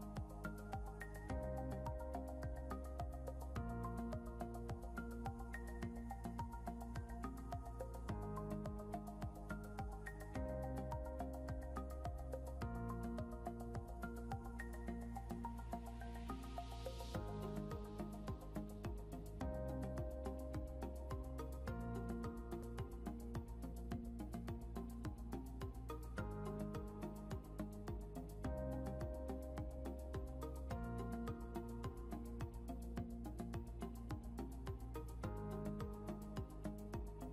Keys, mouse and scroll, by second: 0.4-4.6 typing, 6.0-7.1 typing, 9.6 shift+9, 11.5 click, 17.2 click, 19.5 l, 21.3 click, 21.9 scroll down 1, 24.9 click, 27.2 click, 34.5-35.7 typing.